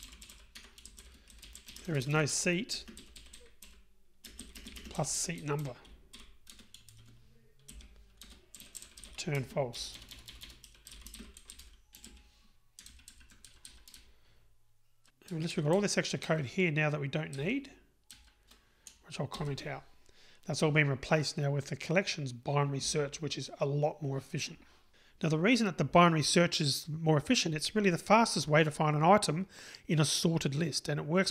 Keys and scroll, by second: 0.6 Tab, 6.6 Return, 19.4 super+/.